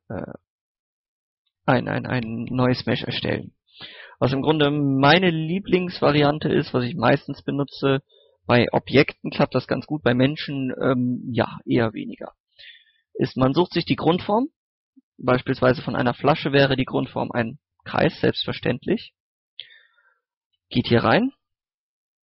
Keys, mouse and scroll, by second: 0.2 Tab, 0.6 x, 1.2 click, 3.6 scroll down 1, 4.0 scroll up 1, 5.2 middle click, 5.4-5.7 scroll down 1, 5.7 middle click, 6.1 scroll down 1, 6.9 middle click, 7.2 scroll up 1, 7.3 middle click, 12.0 scroll up 1, 12.3 scroll down 1, 12.5 scroll up 1, 12.7-13.1 scroll down 2, 12.8 middle click, 13.3 middle click, 13.5-14.0 scroll up 1, 14.0 middle click, 15.9 shift+a, 18.8 click, 19.4 scroll up 1, 20.5 Tab, 21.1 middle click.